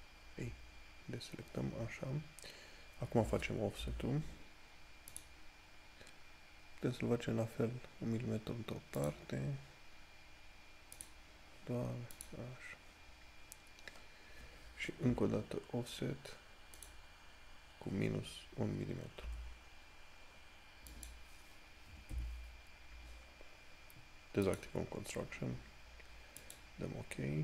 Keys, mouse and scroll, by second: 4.6 o, 15.4 o, 24.8 click.